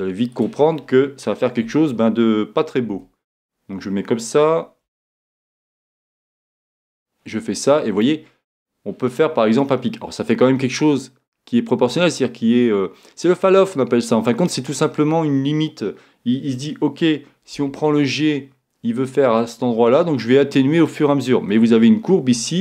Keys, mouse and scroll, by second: 0.3-2.3 right drag, 3.0 g, 6.2-8.0 drag, 17.6 g, 19.5-21.3 drag.